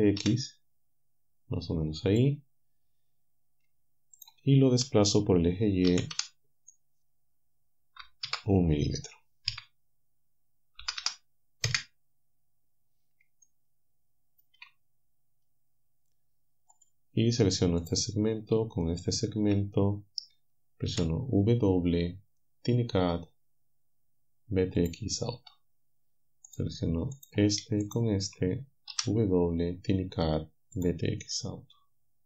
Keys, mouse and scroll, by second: 2.1 click, 5.9 g, 8.3 shift+0, 9.5 KP_1, 10.8 m, 11.0 m, 11.7 Return, 13.5-14.6 shift+drag, 16.8 click, 17.9 click, 18.9 shift+right click, 20.9 w, 24.8 click, 26.5 right click, 27.2 right click, 27.9 shift+right click, 28.9 w, 30.8 click, 31.5-32.2 drag.